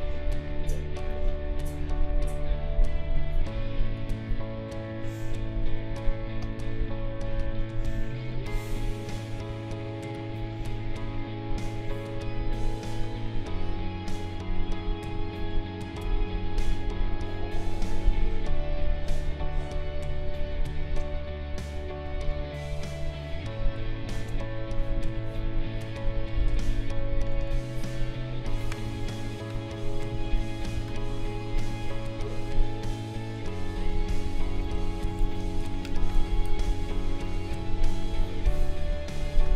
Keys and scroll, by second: 4.5 ctrl+a, 15.8 ctrl+shift+a, 24.1 ctrl+shift+a, 28.8 d, 31.3 d, 35.4 space, 35.5 KP_Subtract, 35.6 space.